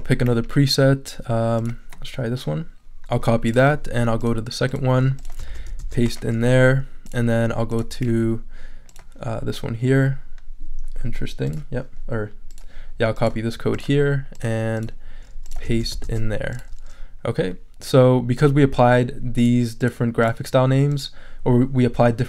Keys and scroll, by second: 5.5 super+a, 5.8 super+v, 15.7 super+a, 16.0 super+v.